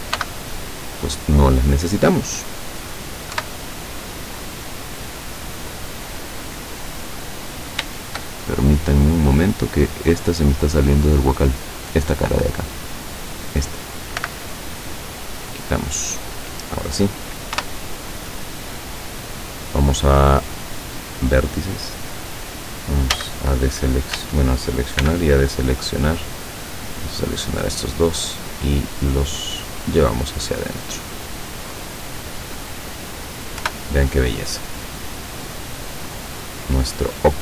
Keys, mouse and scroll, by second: 0.3 x, 0.9 click, 3.5 KP_7, 4.3-4.6 scroll down 2, 6.0-7.5 middle drag, 7.5-7.9 scroll up 2, 8.5-10.1 shift+middle drag, 10.4 right click, 11.1 right click, 11.6 right click, 12.2 right click, 12.7 right click, 14.3 x, 14.8 click, 17.6 KP_7, 21.0 click, 23.2 a, 24.2 a, 25.1 b, 25.4-26.7 drag, 27.2-29.0 drag, 29.3 scroll down 1, 29.8-31.6 middle drag, 31.6 scroll down 1, 33.7 KP_7, 34.4-35.1 scroll down 4, 35.5-36.7 middle drag, 37.0 middle click.